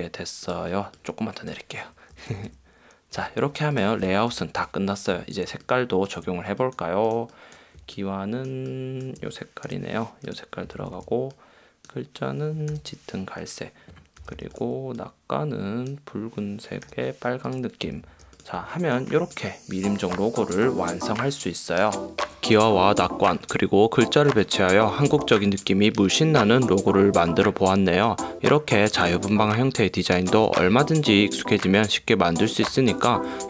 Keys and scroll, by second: 2.4 Down, 3.4 Up, 4.6 super+0, 5.4 space, 8.0 space, 9.9 |, 14.5 v, 17.2 i, 18.2 v, 18.9 space, 19.5 super+space, 20.4 space, 24.1 super+0, 24.9 BackSpace, 25.1 v, 29.1 space, 33.2 super+0.